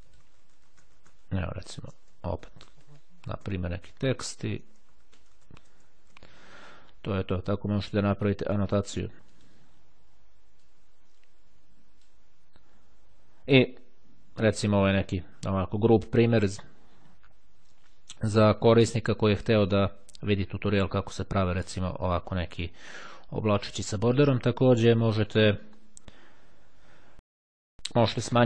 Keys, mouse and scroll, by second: 0.1-6.6 typing, 0.1 click, 7.7 click, 9.4 click, 10.8-12.6 drag, 25.0 click.